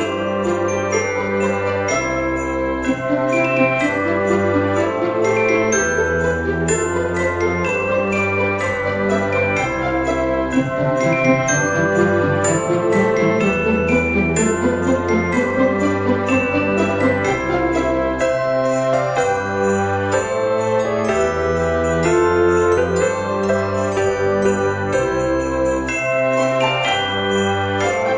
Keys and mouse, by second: 1.7 F6, 3.7 click, 5.1 click, 7.4 click, 8.9 click, 10.0 click, 12.3 click, 13.5 click, 14.5 click, 15.4 click, 20.1 click, 24.1 F6, 25.5 click, 26.3 click.